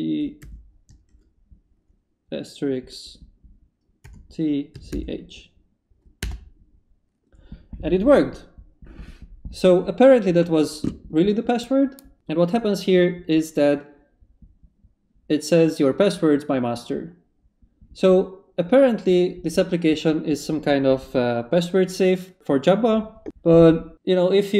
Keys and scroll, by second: 0.4 shift+8, 4.0-5.4 typing, 6.2 Return.